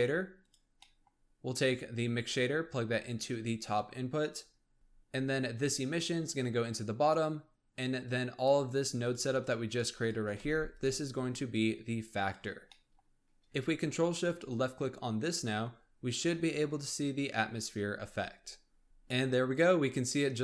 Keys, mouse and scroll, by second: 0.8-1.9 middle drag, 1.9 click, 5.5 click, 7.9 click, 8.9 shift+click, 9.4 shift+click, 9.6 shift+click, 9.9 shift+click, 10.4 g, 11.4 click, 12.6-14.1 middle drag, 14.1 ctrl+shift+click.